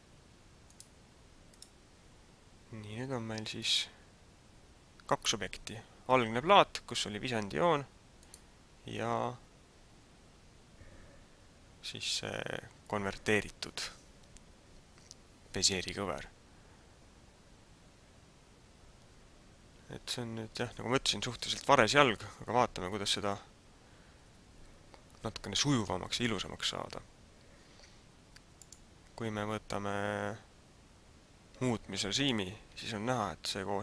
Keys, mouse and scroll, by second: 0.8 click, 3.5 right click, 8.4 right click, 28.7 click, 33.2-33.8 scroll up 3.